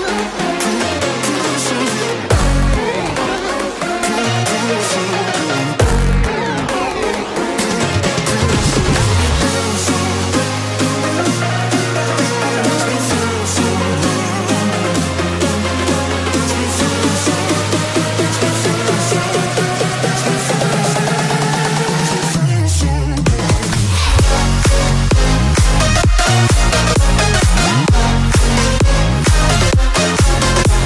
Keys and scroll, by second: 0.4 ctrl+z, 3.8 space, 14.1 ctrl+Return, 17.5 Return, 18.4 Delete, 25.0 space.